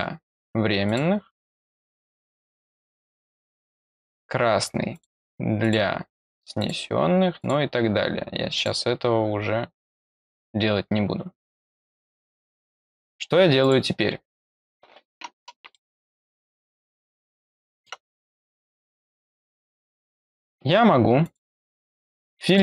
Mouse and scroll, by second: 0.8 click, 1.9 click, 2.3 click, 3.7 click, 4.9 click, 5.6 click, 6.5 click, 7.3 click, 8.5 click, 11.5 click, 13.6 click, 15.7-17.8 middle drag, 21.2 click, 22.4 click.